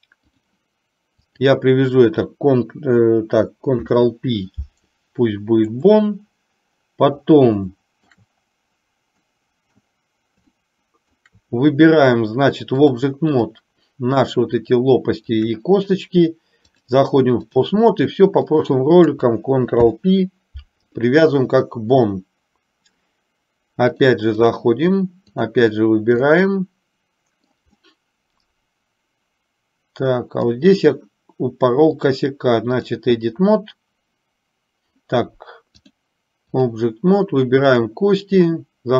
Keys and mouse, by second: 1.3 click, 3.8 ctrl+p, 7.9 shift+middle click, 9.4 middle click, 10.7 shift+middle click, 12.9 click, 15.6 shift+click, 17.0 click, 18.6 click, 19.8 ctrl+p, 24.2 click, 25.4 click, 26.4-27.7 middle drag, 28.0-30.7 middle drag, 32.2 click, 36.0 click.